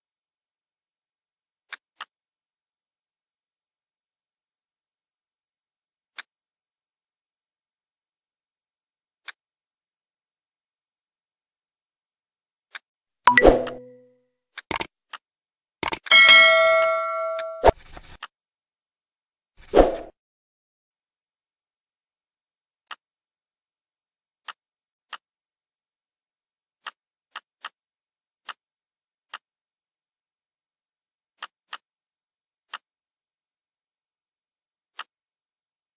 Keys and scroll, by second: 24.9 ctrl+z.